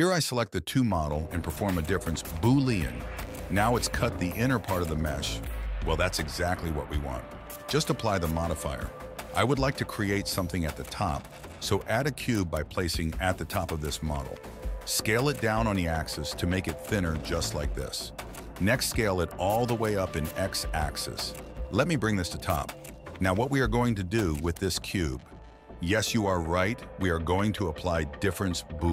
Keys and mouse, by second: 0.7 ctrl+shift+b, 3.1 middle click, 3.3 middle click, 4.5 right click, 5.6 right click, 6.0 m, 7.0 KP_1, 8.7 shift+a, 10.7 click, 11.3 shift+a, 13.1 g, 14.9 s, 17.8 s, 20.6 g, 23.3 s, 24.8 s, 26.1 g, 27.9 shift+click, 28.3 ctrl+shift+b.